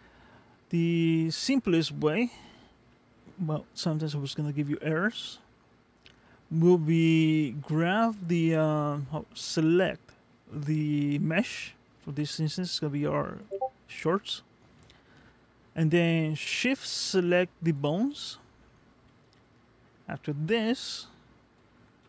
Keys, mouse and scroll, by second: 1.7-2.6 scroll down 2, 1.9 middle click, 3.0-4.1 scroll up 1, 4.1-4.9 scroll up 1, 11.9 g, 17.6 shift+click.